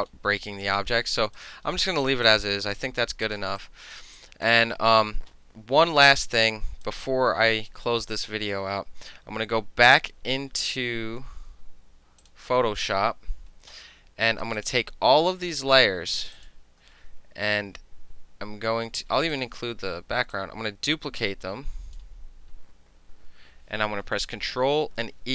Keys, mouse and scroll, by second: 0.2 alt+middle click, 0.5 alt+right drag, 0.7 alt+middle drag, 1.0 alt+middle drag, 1.2 alt+right drag, 1.4 alt+middle click, 1.9-2.3 alt+middle drag, 2.3-3.1 alt+drag, 3.1 alt+middle click, 3.3 click, 3.7-4.0 alt+drag, 4.2 alt+drag, 6.9-7.9 alt+drag, 8.3 alt+middle click, 12.3 click, 14.7 click, 16.4 shift+click, 19.4 ctrl+click, 20.4-22.0 drag.